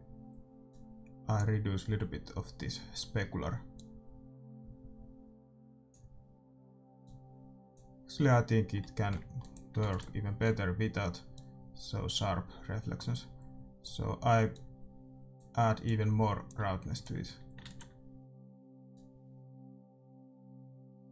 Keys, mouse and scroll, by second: 0.6-2.5 drag, 3.8-5.7 drag, 7.1-8.8 drag, 8.8 middle click, 9.5-17.8 drag, 9.8 ctrl+s, 17.6 ctrl+s, 19.0-20.8 drag.